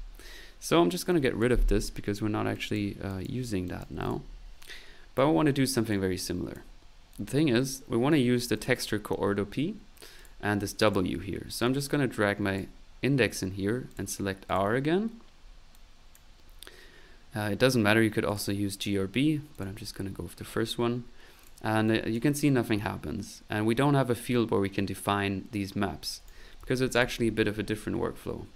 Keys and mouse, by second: 1.1 click, 2.5 click, 2.9 typing, 3.1 click, 3.7 click, 5.1 click, 6.2 click, 7.1 click, 8.6 click, 11.6 click, 13.9 click, 14.5 click, 15.7 click, 18.3 click, 19.5 click, 21.4 click, 21.8 click, 25.5 right click, 26.7 ctrl+z, 26.9 ctrl+click.